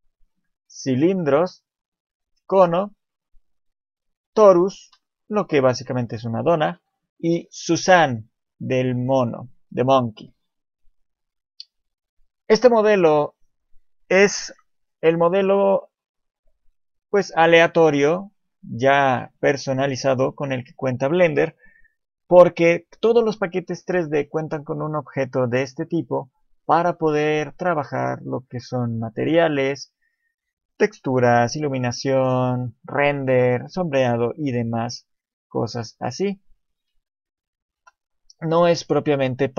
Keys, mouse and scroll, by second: 0.7 click, 4.1 click, 4.8 KP_7, 5.4-5.8 scroll up 6, 5.8 shift+middle click, 6.9 click, 18.5-21.7 scroll down 2, 19.0-21.7 scroll up 1, 35.5 middle click, 36.2-36.9 scroll down 4, 36.9 KP_7, 36.9 KP_4, 37.8 KP_7, 38.6 scroll up 1.